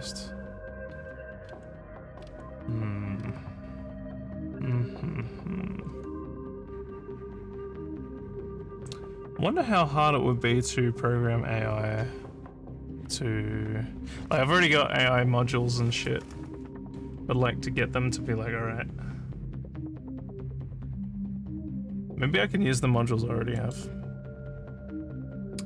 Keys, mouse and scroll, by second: 0.8 scroll down 1, 1.4 scroll down 1, 2.1 scroll down 1, 3.2 scroll down 1, 23.5 click.